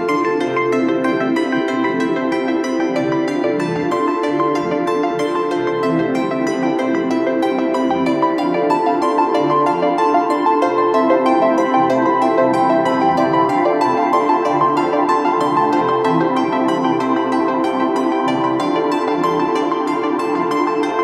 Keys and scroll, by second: 6.0 space, 6.4 space, 6.5 space, 20.4 space, 20.9 space, 20.9-21.0 space.